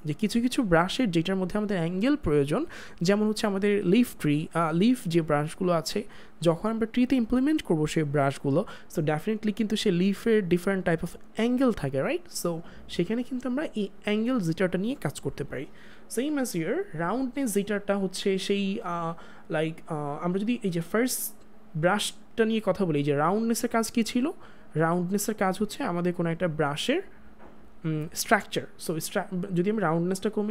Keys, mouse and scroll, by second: 16.9 click, 29.9 click.